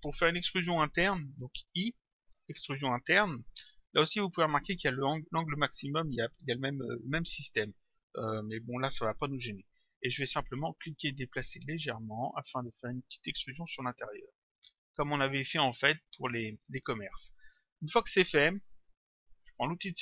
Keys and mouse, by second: 10.8 click, 19.3 click.